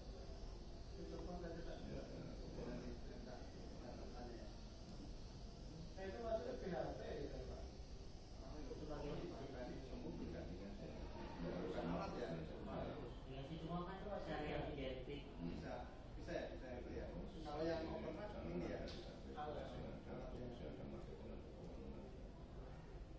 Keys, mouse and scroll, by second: 5.6 shift+f.